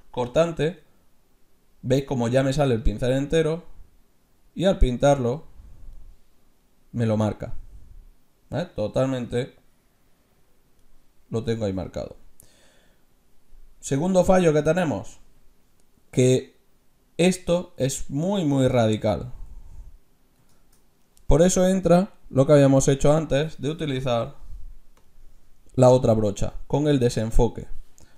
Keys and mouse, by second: 0.4 f, 3.5-5.3 drag, 6.6-8.5 middle drag, 8.6-11.0 middle drag, 9.6-11.3 drag, 11.9 ctrl+z, 18.1-19.8 middle drag, 19.8-22.5 drag, 19.8-22.5 right drag, 20.3-22.5 middle drag, 23.1 click, 25.1-26.7 drag.